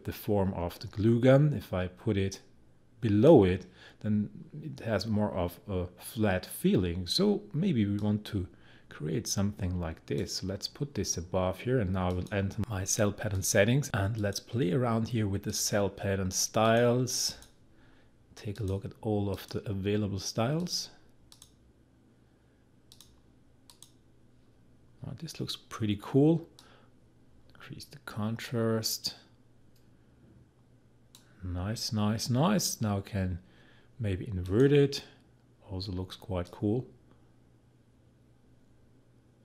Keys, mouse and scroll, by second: 2.3-8.0 drag, 8.0-12.1 drag, 13.3 click, 26.6-39.4 drag.